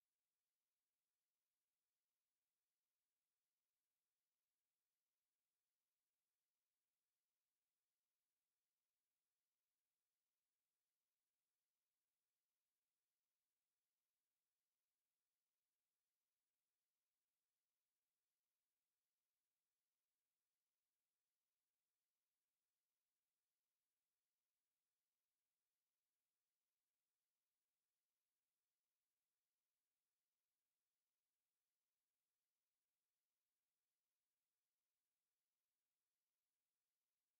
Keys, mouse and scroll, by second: 0.6 click, 1.8 click, 3.4 click, 6.2-7.2 drag, 8.0 click, 8.6 click, 10.0 click, 11.5 click, 13.2 click, 15.2 click, 16.6-17.2 drag, 17.6-18.2 drag, 19.0-19.8 drag, 21.2 click, 22.5 Delete, 27.8 click, 30.0 click, 32.4 click, 33.8-34.2 scroll up 1, 35.6 right click, 36.6-37.3 drag.